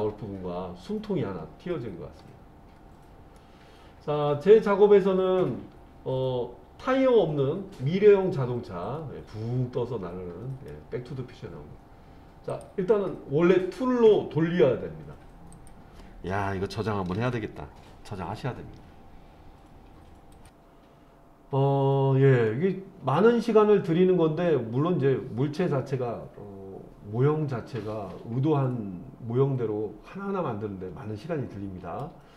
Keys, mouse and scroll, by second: 2.9-3.4 scroll down 1, 3.4-10.7 middle drag, 12.5 click, 15.5 click, 17.2 ctrl+s, 22.5-32.0 middle drag.